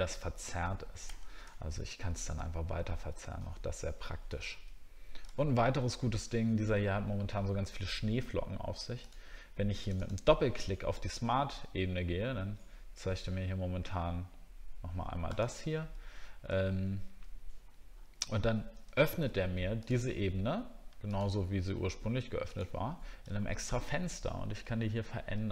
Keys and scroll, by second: 2.5 alt+scroll down 1, 3.1 alt+scroll up 1, 4.3 alt+scroll down 1, 5.4 alt+scroll up 1, 5.9 alt+scroll up 1, 16.5 alt+scroll up 1, 19.0 alt+scroll down 1, 23.3 alt+scroll up 1.